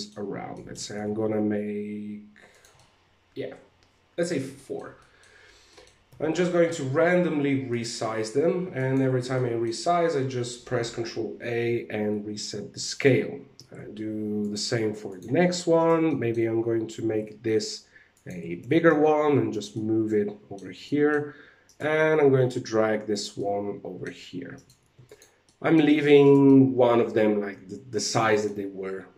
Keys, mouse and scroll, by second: 0.0 middle click, 0.7 shift+d, 2.3 middle click, 4.0 shift+middle click, 4.5 middle click, 5.2 middle click, 5.6 s, 7.7 ctrl+a, 8.9 middle click, 12.4 right click, 13.1 s, 14.3 ctrl+a, 15.3 right click, 15.6 middle click, 16.4 s, 18.1 g, 19.2 middle click, 20.3 middle click, 21.1 right click, 21.6 g, 22.9 middle click, 24.0 right click, 24.3 ctrl+a, 24.9 middle click, 25.7 right click, 25.9 middle click.